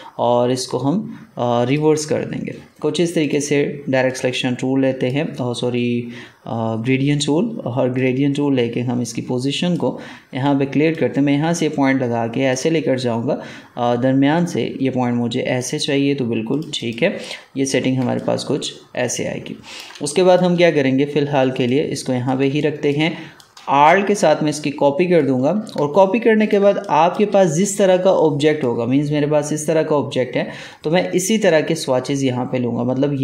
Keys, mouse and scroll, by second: 1.6-7.9 drag, 7.9-16.4 drag, 17.9 ctrl+space, 18.1 ctrl+click, 18.5 ctrl+space, 19.9 space, 20.0 click, 20.4 space, 21.5 click, 22.4 space, 22.5 click, 22.9 space, 23.3-25.7 drag, 25.7 ctrl+space, 25.9 ctrl+click, 26.2 ctrl+space, 26.7 click, 27.1 space, 28.1-31.3 drag.